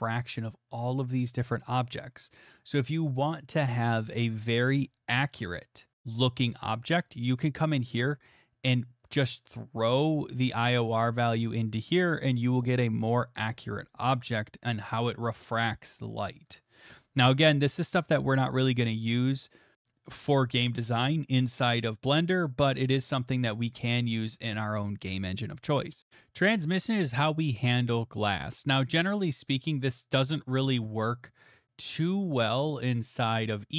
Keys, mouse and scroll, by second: 9.1-10.4 drag, 10.4 scroll, 29.5 click, 32.6 middle click, 32.8 middle click, 32.9 middle click, 33.4 middle click.